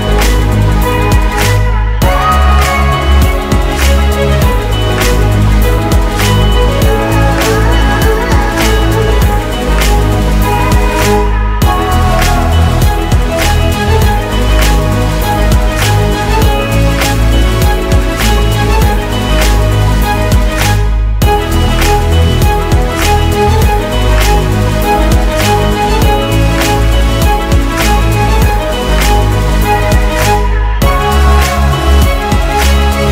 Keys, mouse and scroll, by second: 6.5 typing, 10.2 double click, 22.6 ctrl+alt+Home, 24.9 Return, 25.4 typing, 26.8-28.1 typing, 28.9 Return, 30.4 typing.